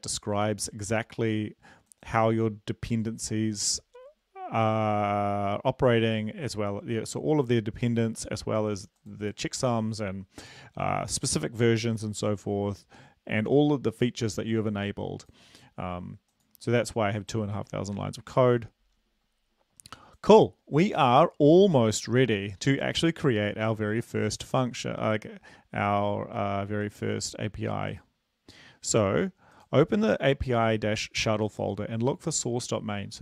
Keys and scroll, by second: 18.5 super+Left.